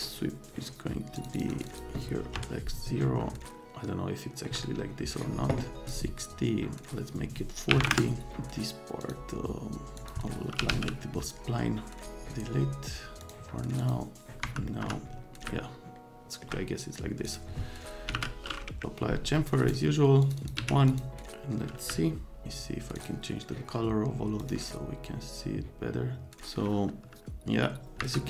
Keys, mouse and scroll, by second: 1.1 click, 1.3 click, 1.5 click, 1.7 click, 2.3 KP_0, 3.6 middle click, 5.8 click, 7.7 KP_4, 7.8 KP_0, 7.8 KP_Enter, 9.0 click, 10.0 click, 10.3-11.2 typing, 13.2 click, 13.8 click, 14.4 F3, 14.7 right click, 14.8 F3, 15.5 right click, 17.3 middle click, 17.8-18.6 typing, 20.2 click, 20.4 click, 20.6 1, 20.9 click, 23.0 click, 24.4 click, 28.0 F4.